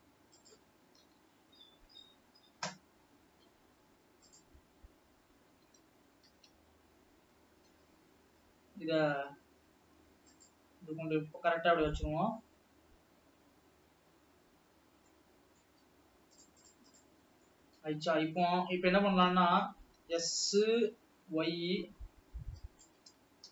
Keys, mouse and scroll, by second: 1.9 ctrl+KP_1, 3.5-5.0 scroll up 3, 5.0 click, 5.2-6.0 scroll up 2, 6.0 s, 14.5 scroll down 1, 15.2-15.5 scroll down 1, 15.5-16.9 middle drag, 16.9 click, 17.2 click, 17.5 click, 18.0-20.3 middle drag, 20.3 s.